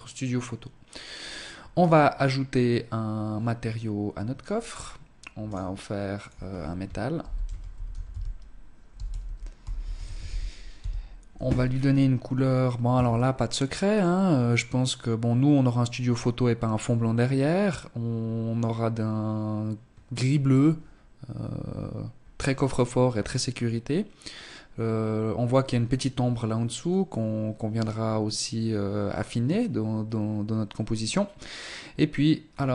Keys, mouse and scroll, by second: 0.9 right click, 3.5-4.0 scroll up 8, 4.5 click, 5.2 click, 10.7-11.5 scroll down 4, 31.5-32.7 scroll down 4.